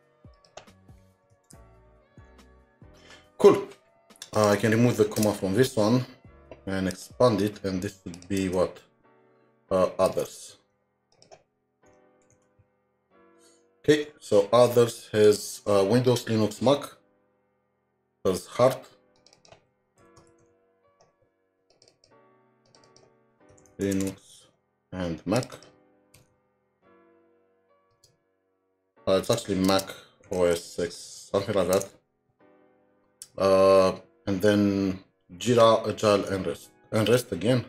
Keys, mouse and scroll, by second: 0.4 shift+click, 1.1-2.8 typing, 5.2 BackSpace, 8.4 alt+Tab, 10.1 alt+Tab, 11.1 shift+click, 12.0-13.1 typing, 13.9 alt+Tab, 17.2 alt+Tab, 17.8-18.7 scroll down 2, 19.4 double click, 20.1-21.9 typing, 21.9 double click, 23.8-24.6 typing, 25.5 double click, 26.6-27.4 typing, 30.3-32.4 typing, 32.4 alt+Tab, 36.2 alt+Tab, 37.0 alt+Tab.